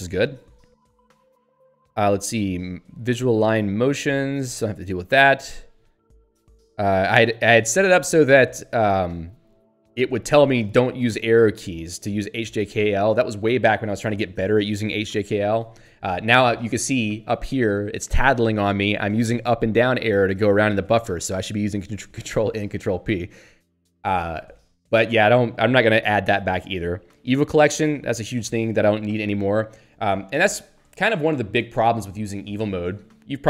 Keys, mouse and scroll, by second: 1.1 Up, 3.7 Down, 7.1 Up, 9.5 Down, 16.8 Up, 19.5 Down, 19.7 Up, 20.0 Down, 21.0 ctrl+n, 21.8 ctrl+p, 22.9 ctrl+n.